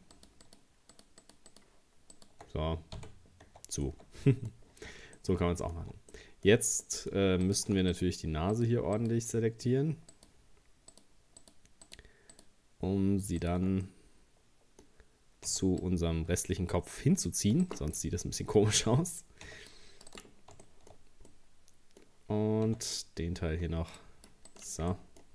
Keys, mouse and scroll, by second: 0.2 shift+right click, 0.5 shift+right click, 1.0 shift+right click, 1.2 shift+right click, 1.5 shift+right click, 2.2 shift+right click, 3.0 f, 3.5 Tab, 3.9 middle click, 4.7-5.2 scroll down 2, 5.2 middle click, 5.8 Tab, 6.1 middle click, 6.5 scroll up 2, 6.9 middle click, 7.5 right click, 7.9 alt+shift+right click, 8.6 alt+shift+right click, 9.0 alt+shift+right click, 10.1 alt+shift+right click, 10.9 alt+shift+right click, 11.4 alt+shift+right click, 11.9 alt+shift+right click, 12.4 alt+shift+right click, 13.4 alt+shift+right click, 13.9-15.5 middle drag, 15.5 c, 18.0-19.5 middle drag, 19.5 c, 20.7 shift+middle click, 21.0-21.3 scroll up 3, 21.3-22.7 middle drag, 22.7 c, 24.9 middle click, 25.2 scroll down 1.